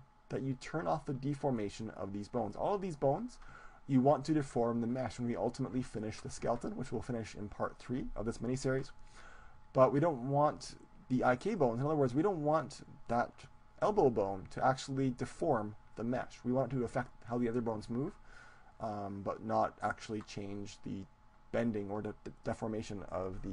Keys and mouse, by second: 1.6-3.7 middle drag, 12.2-14.2 right drag.